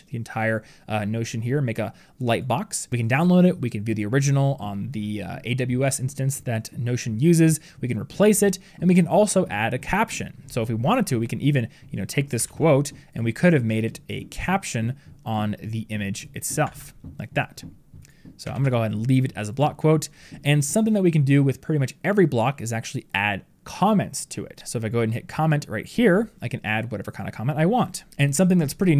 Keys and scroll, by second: 12.3 ctrl+c, 16.5 ctrl+v, 18.3 ctrl+z.